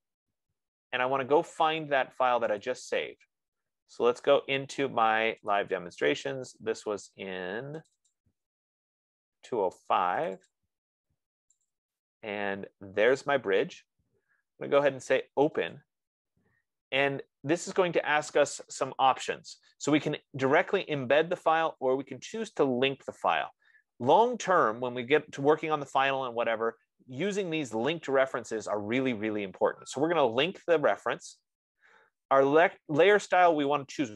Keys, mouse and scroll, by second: 0.5 click, 3.0 click, 5.9 click, 6.1 click, 8.3 click, 8.7 click, 10.6 click, 11.0 click, 12.1 click, 12.3 click, 13.7 click, 16.2 click, 23.7 click, 27.4-28.6 drag, 34.0-34.1 drag.